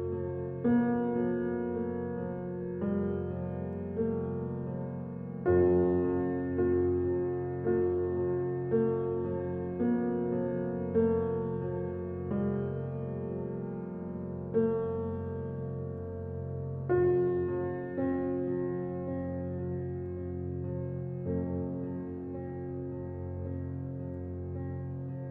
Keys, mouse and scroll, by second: 0.9 click, 1.2 s, 2.5 Tab, 2.9-3.5 middle drag, 3.5-3.8 scroll down 1, 3.8-4.5 shift+middle drag, 4.5-6.4 drag, 7.6 click, 8.3-8.7 middle drag, 8.7 scroll up 1, 9.3 ctrl+2, 10.1-10.5 middle drag, 10.5 Tab, 12.4 click, 12.9-13.9 middle drag, 13.9 Tab, 14.8-15.5 shift+middle drag, 15.5 r, 18.8 r, 20.9 scroll down 3, 21.1-21.8 middle drag, 21.8 r, 23.9-24.3 middle drag, 24.3 scroll up 1, 24.7 middle drag, 24.9 scroll up 1, 25.1-25.3 shift+middle drag.